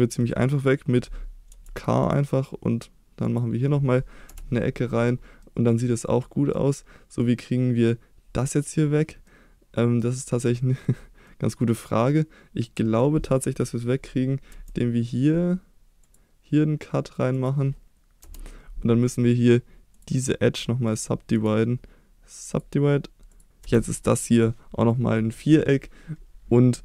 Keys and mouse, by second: 0.3 middle click, 1.5 k, 5.4 middle click, 6.2 middle click, 7.2 middle click, 9.3 middle click, 10.7 middle click, 11.4-12.6 middle drag, 14.5 k, 20.9 click, 21.3-22.6 right drag, 23.6 3.